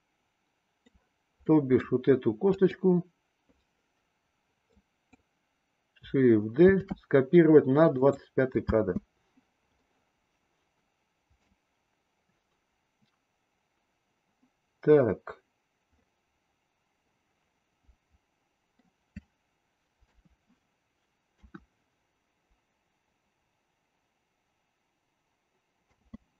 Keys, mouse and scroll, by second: 1.3-1.9 middle drag, 2.5 click, 4.7-5.1 drag, 6.7 shift+d, 8.6 space, 9.7-11.4 middle drag, 16.0-18.8 middle drag, 20.1 KP_3, 21.3 KP_1, 25.9 space.